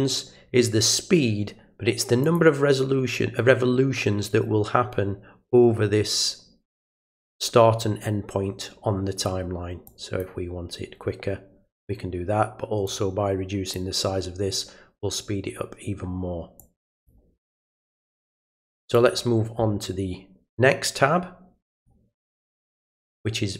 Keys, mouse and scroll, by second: 2.2 click, 9.8 click, 12.8 click, 16.6 click, 18.4 click, 21.7 click.